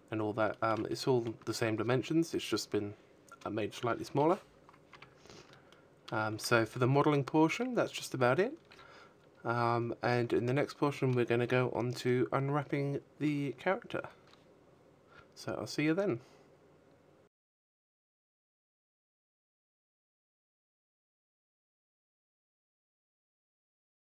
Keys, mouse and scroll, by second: 1.5 KP_1, 2.2 Tab, 3.0 shift+middle click, 3.5 a, 3.7 z.